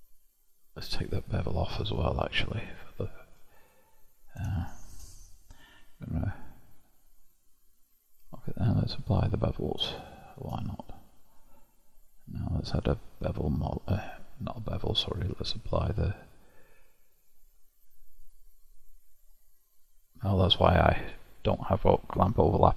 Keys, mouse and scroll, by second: 0.6 click, 1.2 click, 2.0-3.6 middle drag, 3.6 click, 4.5-9.1 shift+middle drag, 9.1 click, 10.0-12.7 shift+middle drag, 14.0-19.1 drag, 21.2 click.